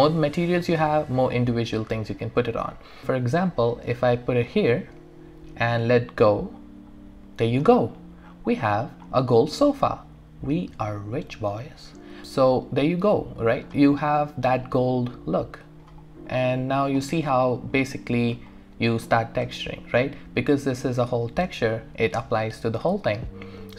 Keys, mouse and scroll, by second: 8.3 scroll down 1, 9.0-10.3 scroll up 1, 12.2-13.9 alt+drag, 13.9 alt+right click, 14.5-16.0 alt+drag, 16.0 alt+right click, 17.1 alt+click, 17.9 alt+right click, 18.5 alt+middle click, 19.1 alt+click, 22.8-23.7 scroll down 1.